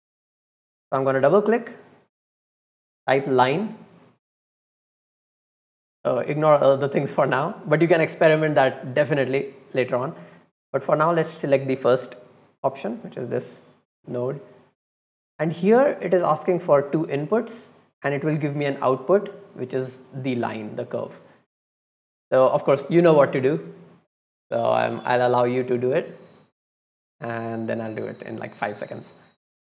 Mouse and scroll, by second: 0.9 click, 11.8 click, 12.9-13.4 drag, 14.2 middle click, 14.6 middle click, 14.8 middle click.